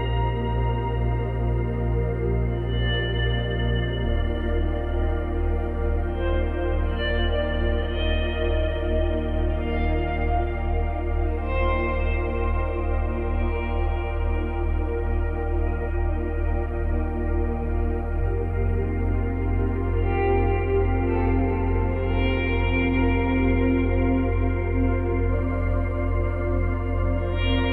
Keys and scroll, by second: 2.8 space, 5.0 space, 10.0 space, 12.5 space, 13.7 space, 15.1 space, 19.6 F9.